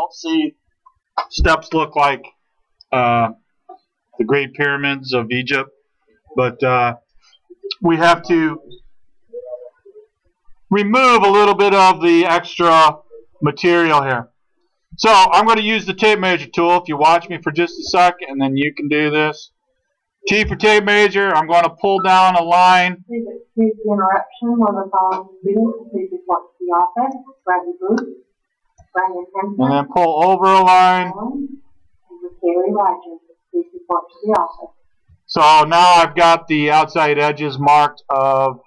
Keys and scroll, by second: 20.4 t.